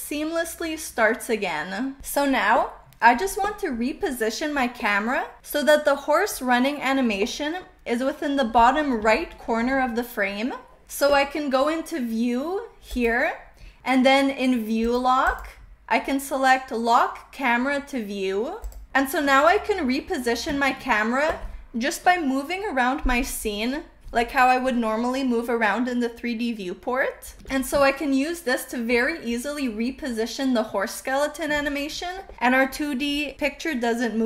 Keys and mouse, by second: 1.8 KP_0, 9.1-9.6 shift+middle drag, 13.6 n, 14.7 click, 15.2 click, 18.5 click, 27.2 shift+middle drag, 27.9-31.5 shift+middle drag.